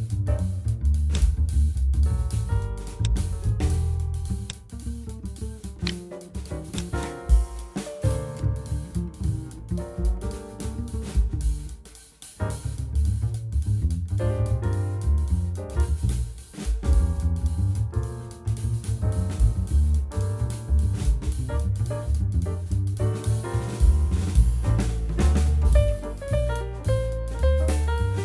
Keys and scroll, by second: 2.2 /.